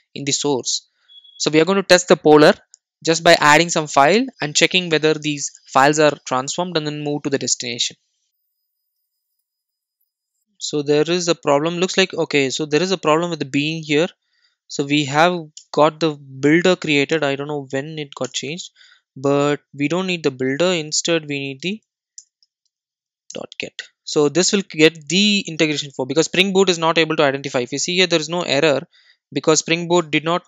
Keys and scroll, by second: 10.4 super+z, 23.3 Return, 25.2 super+s, 29.9 super+r.